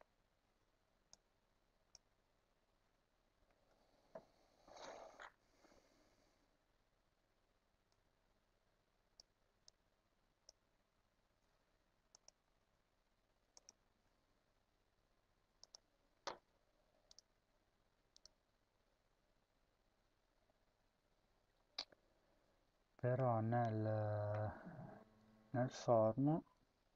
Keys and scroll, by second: 1.8 Tab, 2.0 Tab, 11.0 ctrl+c, 12.4 ctrl+v, 13.6 ctrl+s.